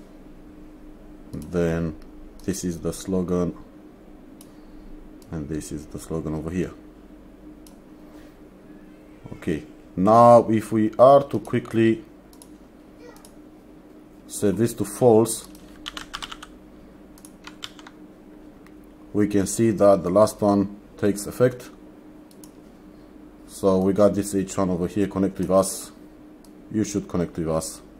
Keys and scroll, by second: 15.8-16.9 typing, 17.7 ctrl+s.